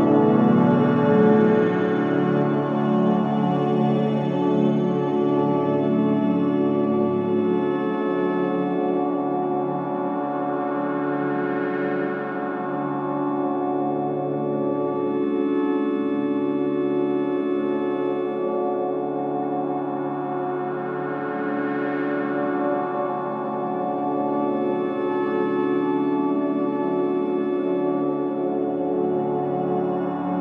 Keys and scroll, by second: 3.8 1, 3.9 0, 4.0 Return, 7.0 ctrl+z, 9.5 ], 15.0 ], 20.3 ], 21.5 ctrl+d, 21.5 Escape, 22.5 ], 22.8 ctrl+d, 22.9 Escape, 24.5 4, 30.2 3.